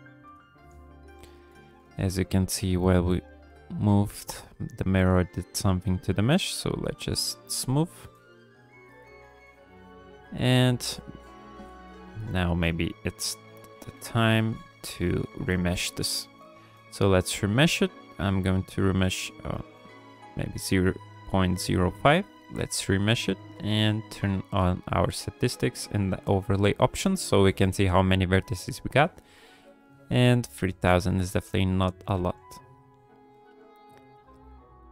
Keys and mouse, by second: 0.2 KP_1, 1.5 ctrl+drag, 3.1-4.7 drag, 4.7 middle click, 5.0 middle click, 5.8 middle click, 6.4 shift+click, 6.8 shift+click, 7.2 click, 7.6 shift+click, 7.9 shift+click, 8.3 click, 8.6 click, 8.9 click, 9.4 shift+drag, 9.6 shift+middle click, 9.8 shift+click, 10.1 click, 10.8 shift+click, 11.2 shift+click, 11.5 shift+click, 11.9 shift+click, 12.3 click, 12.5 middle click, 12.7 ctrl+click, 13.0 click, 13.6 ctrl+click, 13.9 click, 14.2 shift+click, 14.5 shift+click, 14.9 click, 15.5 click, 15.6 click, 16.3 shift+r, 21.6 ctrl+r, 23.3-26.9 drag, 27.2 ctrl+click, 28.7 click, 29.5 KP_1, 30.5 shift+click, 30.7 g, 31.0 f, 31.5 click, 32.1 f, 32.5 click, 33.3 f, 33.8 click, 34.1-34.9 drag.